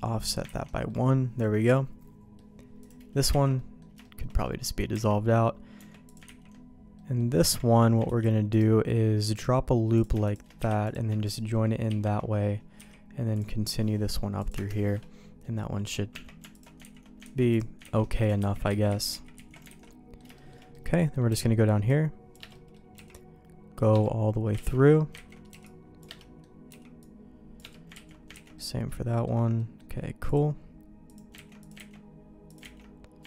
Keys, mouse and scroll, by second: 0.2 middle click, 0.5 ctrl+x, 0.9-2.3 middle drag, 2.8 click, 3.3 ctrl+x, 3.5 middle click, 4.0 shift+middle click, 4.4 middle click, 4.9 Tab, 5.8 Tab, 6.0 click, 6.2 ctrl+x, 6.9 middle click, 7.4 Tab, 8.0 ctrl+r, 9.9 click, 10.2 shift+click, 10.6 j, 10.8 click, 11.2 shift+click, 11.9 shift+r, 12.8 k, 14.9 middle click, 16.1 Tab, 16.5 alt+click, 17.0 ctrl+x, 17.4 ctrl+z, 17.5 click, 17.9 ctrl+x, 18.2 click, 18.4 ctrl+x, 18.7 ctrl+z, 18.9 ctrl+z, 19.1 ctrl+z, 19.3 ctrl+z, 19.7 alt+a, 19.9 middle click, 20.3 shift+middle click, 20.7 middle click, 21.3 c, 22.5 middle click, 22.9 c, 24.7 ctrl+q, 25.3 ctrl+x, 25.5 c, 26.2 middle click, 26.7 c, 28.1 ctrl+q, 28.4 ctrl+x, 28.5 middle click, 29.5 middle click, 30.2 click, 31.1 click, 31.6 click, 31.8 ctrl+x, 32.5 click, 32.8 ctrl+x.